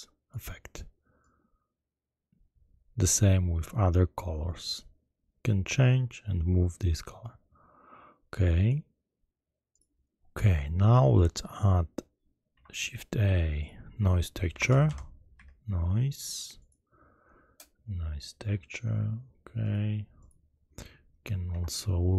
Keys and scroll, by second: 12.4 shift+a, 14.4 n, 14.6 o, 14.8 i, 15.3 s, 21.4 shift+a.